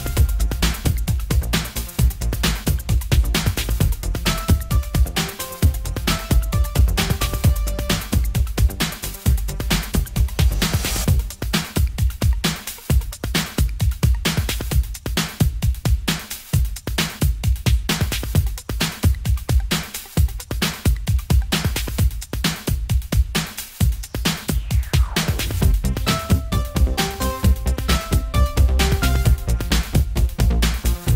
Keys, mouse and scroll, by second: 1.5 shift+z, 2.3 click, 3.5-4.5 drag, 4.9 click, 5.6 middle click, 6.7-8.8 middle drag, 8.8 s, 10.6 middle click, 10.7-12.0 drag, 12.0-13.5 middle drag, 14.9-15.9 middle drag, 18.4 middle click, 20.6-22.7 middle drag, 22.7 click, 24.3 click, 25.2 middle click, 26.6 click, 28.4 click.